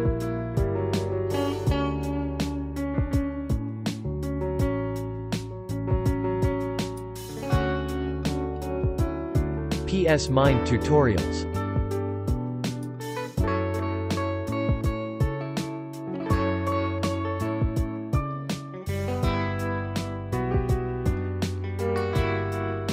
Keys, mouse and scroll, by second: 0.0-0.5 typing, 0.6 click, 3.5-3.9 typing, 4.3 click, 4.8 click, 5.2 space, 5.9 click, 7.0 z, 7.1 click, 9.6 space, 9.8 click, 10.3 space, 10.5 click, 11.2 0, 13.1 click, 15.5 click.